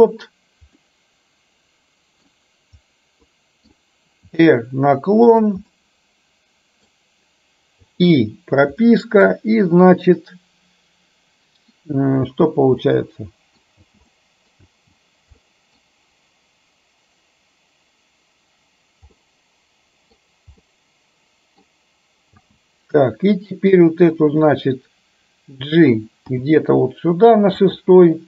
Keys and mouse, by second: 0.9-2.4 middle drag, 3.4 middle click, 4.4 r, 5.8-6.9 middle drag, 7.8 i, 8.8-9.3 middle drag, 12.3 space, 12.9-13.6 middle drag, 13.9 space, 14.2-14.6 middle drag, 15.3 space, 15.4-15.8 middle drag, 19.2-20.2 middle drag, 20.7-21.7 middle drag, 22.4 space, 23.8-24.6 drag, 26.3 g.